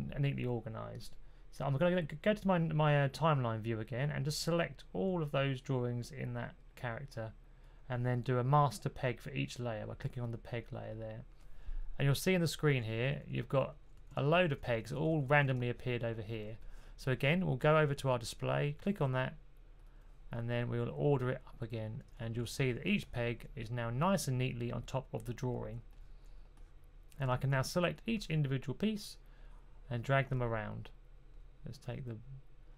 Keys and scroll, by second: 12.7-15.3 typing, 17.6-18.3 typing, 22.2 typing.